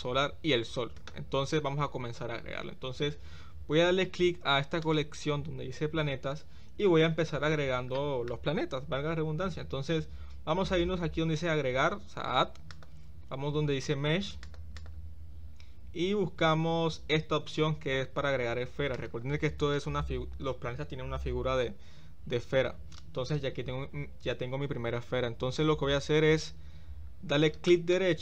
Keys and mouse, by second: 8.1 shift+middle click, 12.7-14.7 drag, 14.8-19.2 drag.